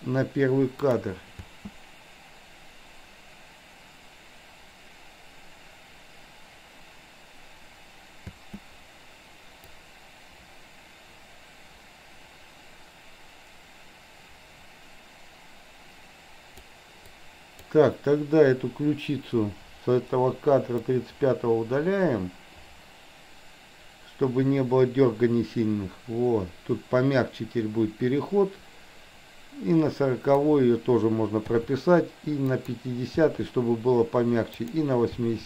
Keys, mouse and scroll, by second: 0.9 click, 1.4 space, 8.3 space, 9.8-16.7 drag, 17.2-17.7 drag, 19.5 Delete, 20.9-30.5 drag, 31.7 i, 32.5 click, 33.3 i, 34.7 click, 35.2 i.